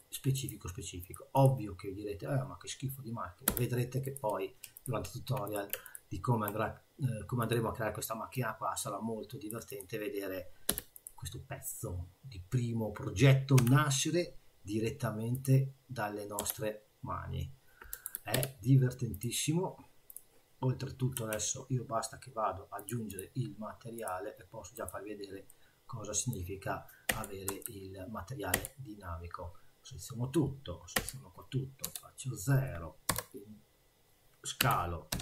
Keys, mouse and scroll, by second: 0.4 click, 1.0 click, 1.3 click, 3.5 2, 4.0 click, 4.7 ctrl+click, 5.5 click, 5.8 shift+click, 7.4 click, 8.4 click, 9.7 click, 10.7 3, 10.9 click, 13.6 i, 16.4 e, 18.0 \, 18.3 e, 20.1 click, 21.1 Tab, 22.8 click, 23.1 click, 24.0 click, 25.5 middle click, 27.1 a, 27.5 Tab, 28.5 a, 30.9 a, 31.8 KP_0, 33.1 Return, 34.6 s.